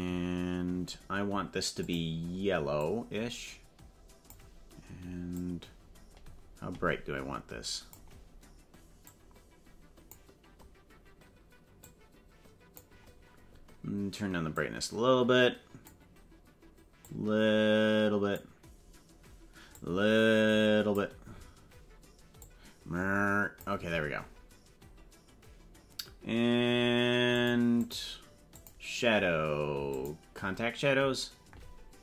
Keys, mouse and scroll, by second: 1.8 click, 5.4-8.0 drag, 9.0-10.1 drag, 11.8-12.9 drag, 14.7-15.9 drag, 17.1-18.5 drag, 19.9-21.1 drag, 22.4-23.7 drag, 27.4 click, 27.8 click, 28.6 click, 29.9 click.